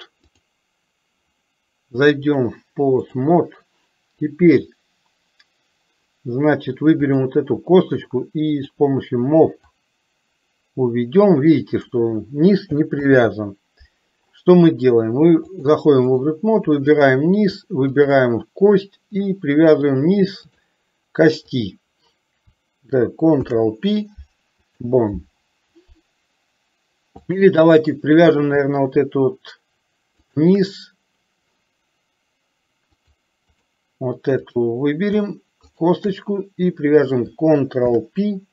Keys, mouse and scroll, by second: 0.4 click, 2.4-3.4 drag, 7.2 click, 8.6 click, 9.8-12.1 drag, 13.1 ctrl+z, 15.8 click, 17.1 click, 18.1 shift+click, 19.9 click, 23.5 ctrl+p, 27.4 click, 33.1 click, 34.6 click, 38.0 ctrl+p.